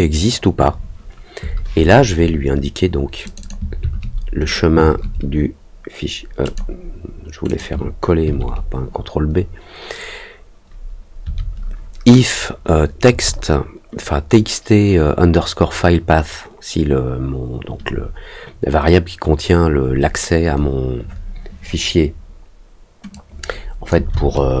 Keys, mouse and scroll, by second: 3.2 click, 4.4 click, 6.4 click, 7.4 click, 23.1 click.